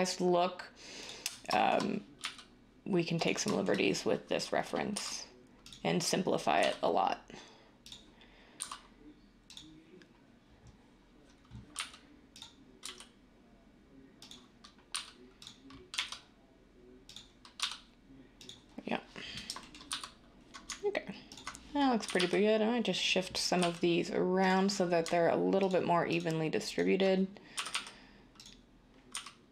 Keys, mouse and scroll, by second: 2.2 r, 4.9 s, 6.6 e, 8.6 s, 11.8 r, 12.8 g, 14.9 s, 15.9 e, 17.6 s, 19.9 z, 22.0 g, 22.2 g, 23.6 g, 27.5 g, 27.7 g, 29.1 g.